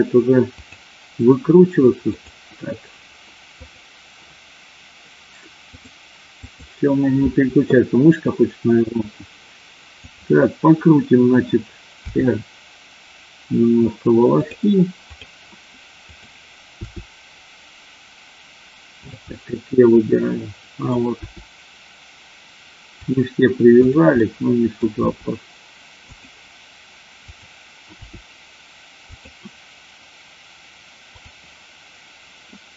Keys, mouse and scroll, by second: 0.6 click, 2.1 click, 5.6-6.6 drag, 10.0 click, 12.0 r, 14.3 click, 16.1 click, 16.7 r, 19.3-20.8 middle drag, 21.1 r, 23.7 click, 24.1 middle click, 25.0 r, 26.0 click, 27.2 click, 28.0 r, 31.1 click.